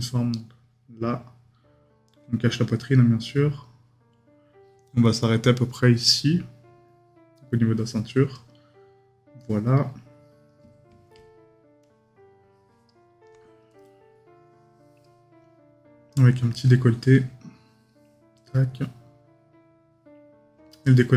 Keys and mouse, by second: 9.4 right click.